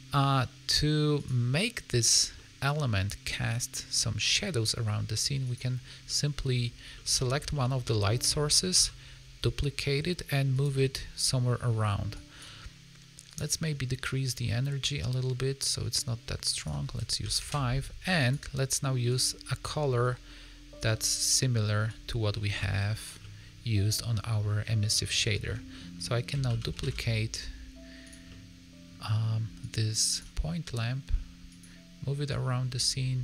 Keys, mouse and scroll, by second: 2.3 middle click, 5.4 click, 5.9 scroll down 1, 6.0 middle click, 6.9 middle click, 7.4 middle click, 8.7 shift+d, 10.7 middle click, 12.1 click, 13.2 click, 14.2 click, 16.5 click, 18.1 click, 21.8 click, 23.1 middle click, 24.7 middle click, 25.2 shift+middle click, 25.6 middle click, 26.4 shift+d, 28.2 middle click, 29.5 click, 31.4 click.